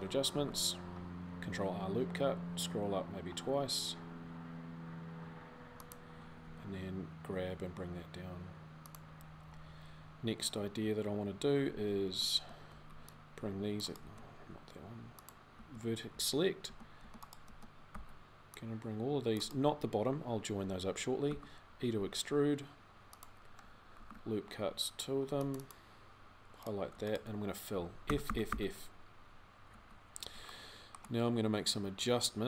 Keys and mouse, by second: 0.1 ctrl+r, 11.5 a, 11.8 a, 12.4 c, 13.8 a, 15.9 c, 17.3 a, 21.1 e, 23.8 ctrl+r, 27.8 f, 28.0 f, 28.2 f, 29.5 z.